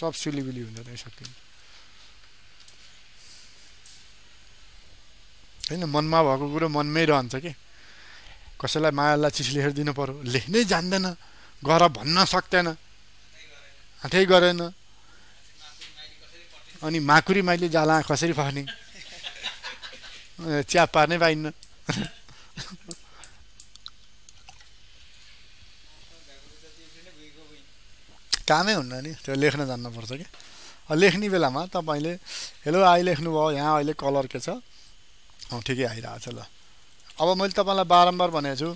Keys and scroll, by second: 34.3 ctrl+a.